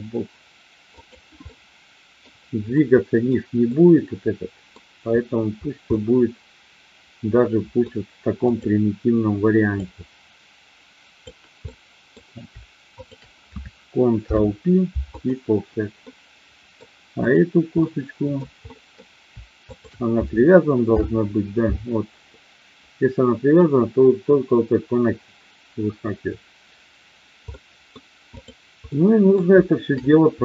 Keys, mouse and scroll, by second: 1.0 click, 1.5 middle click, 2.8 middle click, 3.7-4.7 middle drag, 5.8-7.8 middle drag, 8.3 click, 9.7-11.2 drag, 11.6 middle click, 12.8 shift+click, 14.1 ctrl+p, 16.0 middle click, 17.2 click, 17.8 middle click, 18.6 middle click, 19.7 shift+click, 20.8 ctrl+p, 27.5 middle click, 28.8 middle click, 30.0 middle click.